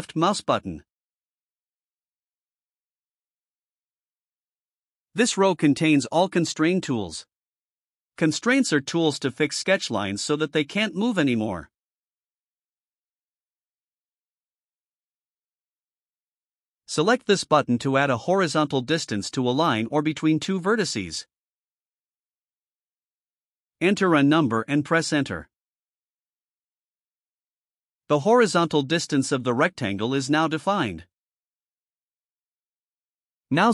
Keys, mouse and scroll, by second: 0.1 click, 21.5 click, 24.4 5, 25.1 0, 32.4 click.